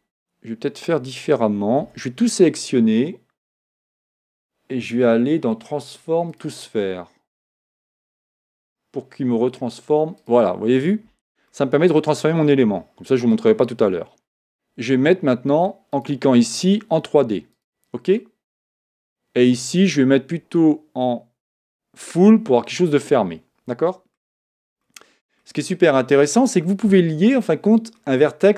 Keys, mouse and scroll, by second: 1.4 a, 1.8 a, 3.7-6.7 drag, 11.5-15.9 middle drag, 15.9 click, 17.6 click, 18.2-19.8 middle drag, 19.8-22.9 drag, 22.9-24.5 middle drag, 24.5 Tab, 24.8-28.5 middle drag.